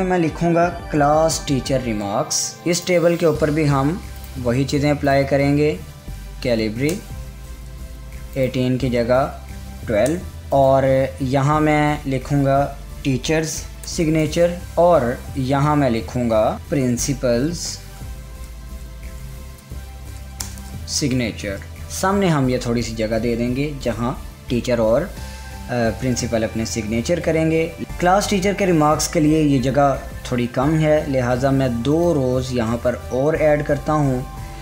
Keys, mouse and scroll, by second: 2.3 typing, 6.6-7.3 typing, 7.5 Return, 8.9 click, 9.9-10.6 typing, 11.1 click, 12.8-13.9 typing, 14.6 Tab, 16.5-22.3 typing, 27.8 ctrl+z, 32.6 click, 32.8 Tab.